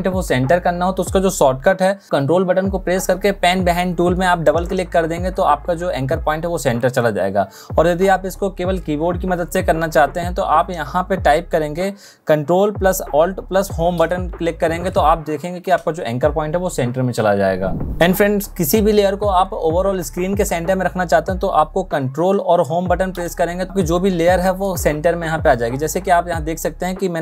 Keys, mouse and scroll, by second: 2.3-6.8 ctrl+drag, 12.3 ctrl+alt+Home, 22.1 ctrl+Home.